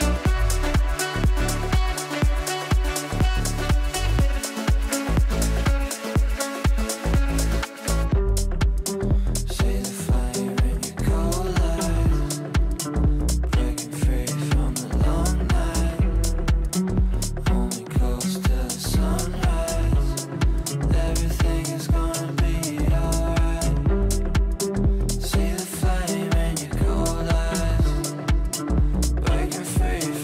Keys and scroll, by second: 19.7 shift+F2.